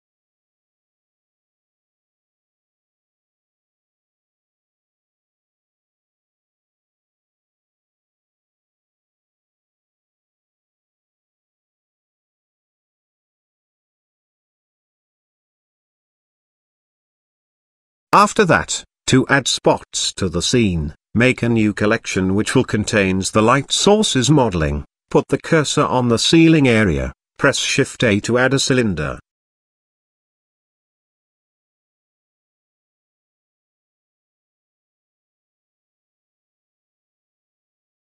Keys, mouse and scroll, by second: 2.1 g, 8.1-8.4 middle drag, 8.9 KP_0, 10.1 click, 10.7 click, 11.3 click, 12.5 click, 13.3 KP_0, 14.3-14.6 middle drag, 14.9-15.2 shift+middle drag, 16.7 click, 17.4 click, 18.5 click, 20.1 click, 20.5 click, 20.7-23.0 drag, 24.5 shift+a, 26.9 s, 28.8 KP_Decimal, 29.5 middle click, 30.3 s, 31.4 s, 32.9-33.8 middle drag, 32.9-33.4 scroll up 1, 34.3 s, 36.6-37.0 middle drag.